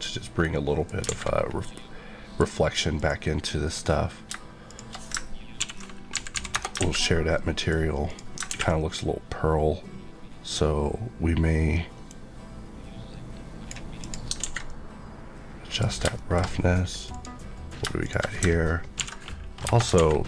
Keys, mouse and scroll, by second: 0.0 middle click, 0.5 middle click, 0.5 middle click, 0.9 scroll up 2, 1.2 a, 1.3-1.6 scroll down 1, 1.6 middle click, 2.9 click, 4.2 shift+click, 5.1 ctrl+click, 5.6 ctrl+l, 6.5 Return, 6.7 alt+a, 7.3 middle click, 8.0 click, 12.0 click, 14.4 alt+a, 14.6 middle click, 15.9 scroll down 1, 16.1 middle click, 16.4 scroll up 1, 17.1 click, 19.0 ctrl+l, 19.6 Return, 19.9 alt+a.